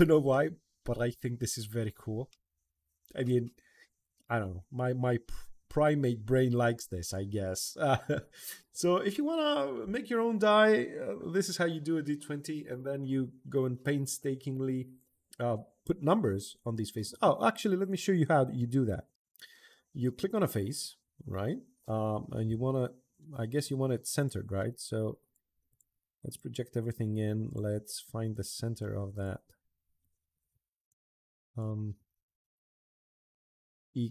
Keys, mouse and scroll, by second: 0.1-0.8 middle drag, 1.6 middle drag, 2.1-3.1 middle drag, 3.5 middle click, 3.8-5.8 middle drag, 6.4 right click, 7.2 middle click, 8.4 middle click, 17.6 click, 20.1 middle click, 24.0 click, 25.0 click, 25.5 click, 26.1 click, 27.2 click, 28.1 click, 28.9 click, 30.2 scroll down 1, 30.6 click, 31.4 click, 31.8 Escape, 33.1 click, 33.9 click.